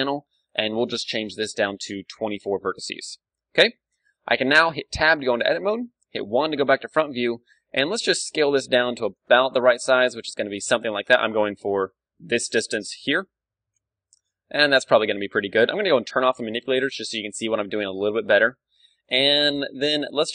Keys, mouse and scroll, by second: 4.8 Tab, 4.8-6.2 middle drag, 6.2 KP_1, 7.3-9.1 middle drag, 7.6 s, 9.1-10.9 drag, 11.5-13.3 drag, 11.5 d, 12.7-14.4 right drag, 14.2-16.3 middle drag, 14.4 s, 15.1-16.9 drag, 16.3 ctrl+space, 16.9-20.3 middle drag.